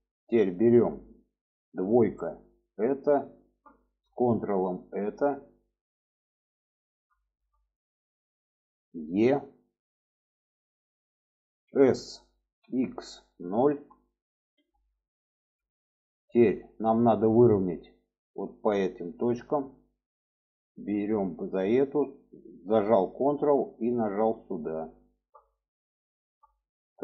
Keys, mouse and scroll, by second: 1.4 2, 2.5 click, 4.6 ctrl+click, 5.2-5.9 middle drag, 6.1-6.8 middle drag, 7.1 shift+middle click, 7.8 shift+middle click, 8.8 e, 11.4 s, 15.5 shift+middle click, 16.5 shift+middle click, 17.9 shift+middle click, 19.9-24.1 drag, 24.8 shift+middle click, 25.9 shift+middle click, 26.9 shift+middle click.